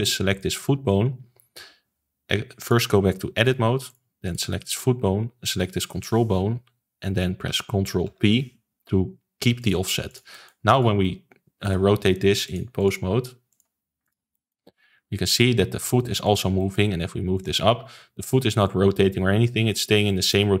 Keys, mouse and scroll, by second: 0.3 click, 2.5-3.9 drag, 4.2 click, 5.6 shift+click, 8.0 ctrl+p, 10.0 click, 10.3 middle click, 10.7 click, 11.0-12.4 middle drag, 12.4 click, 12.7-14.1 drag, 14.3 middle click, 14.6 r, 16.5 middle click, 17.3 click, 18.6 click, 20.0-20.6 middle drag.